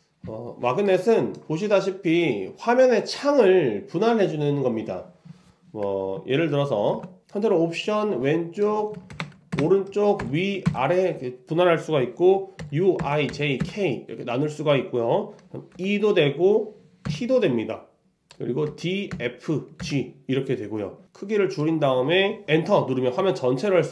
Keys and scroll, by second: 9.2 ctrl+alt+Left, 9.7 ctrl+alt+Right, 10.3 ctrl+alt+Up, 10.7 ctrl+alt+Down, 15.8 ctrl+alt+c, 17.2 ctrl+alt+Up, 18.7 ctrl+alt+o, 22.4 ctrl+alt+Return.